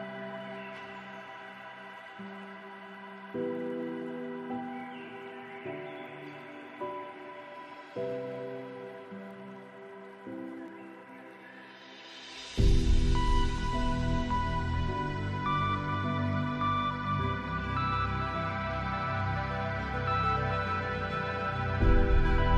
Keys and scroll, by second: 4.6 ctrl+z, 9.9 ctrl+z.